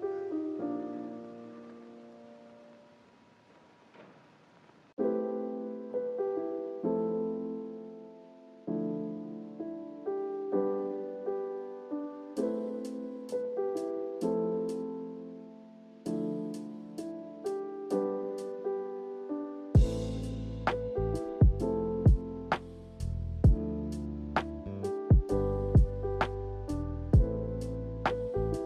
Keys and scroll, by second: 5.0 k, 26.7-27.5 typing.